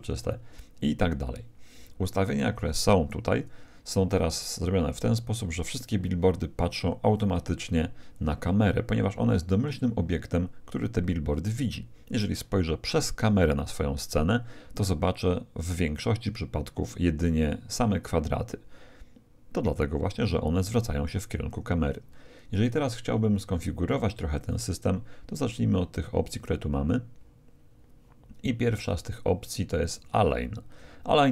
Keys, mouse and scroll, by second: 0.0 Escape, 2.2-4.0 right drag, 5.5 g, 13.2 KP_0, 20.6-22.5 middle drag, 22.5-24.3 right drag, 24.4-26.1 drag, 25.4-29.2 middle drag.